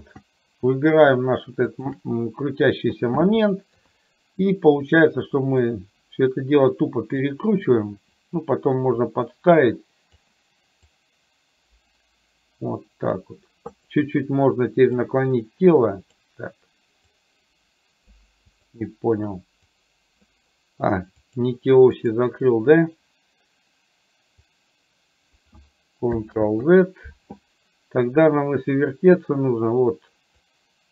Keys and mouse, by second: 0.0 ctrl+z, 1.7 shift+click, 3.8 KP_3, 5.6-7.3 drag, 8.3-10.2 drag, 11.0-13.3 drag, 13.8 click, 15.0-16.3 drag, 17.2-18.2 drag, 18.5 click, 19.8 click, 21.3 click, 22.0 click, 24.5 click, 26.5 ctrl+z, 30.3-30.9 drag.